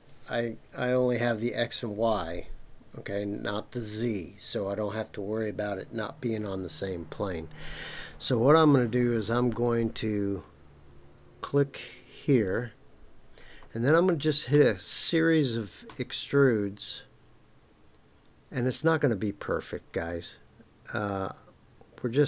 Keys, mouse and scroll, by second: 12.3 click, 12.4 typing, 15.9 e.